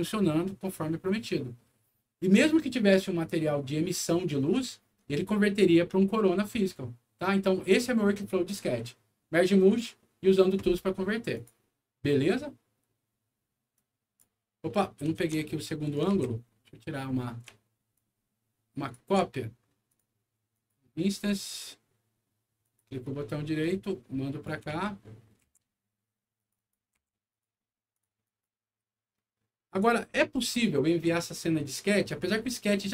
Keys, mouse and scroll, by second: 1.2 scroll down 1, 11.3 click, 13.7 click, 14.7 middle click, 15.1 alt+w, 15.7 middle click, 16.0 alt+w, 16.5 alt+middle click, 17.0 alt+scroll down 2, 17.9 shift+click, 19.8 shift+click, 20.4 shift+click, 21.1 shift+right click, 22.5 click, 23.5 click, 24.6 alt+w, 24.9 alt+middle click, 26.3 click, 26.5 click, 27.2 click, 27.8 click, 28.2 click, 29.6 click.